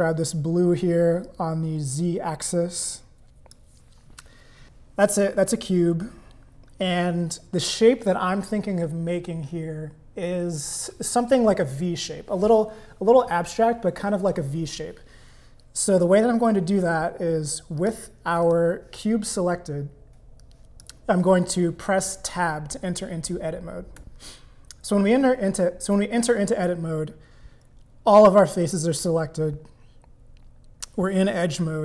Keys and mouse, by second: 1.3-3.5 drag, 17.8 click, 18.4 click, 20.4 click, 27.6 middle click.